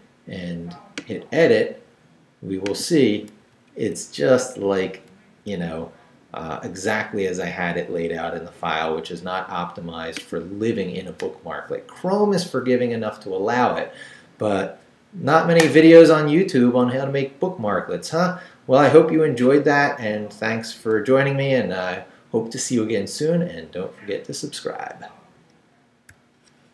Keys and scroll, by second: 3.3 Down, 5.1 Right, 5.6 Left.